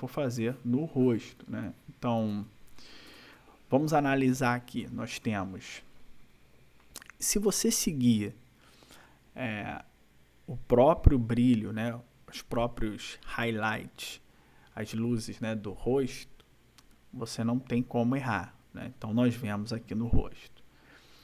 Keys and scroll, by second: 3.1 ctrl+-.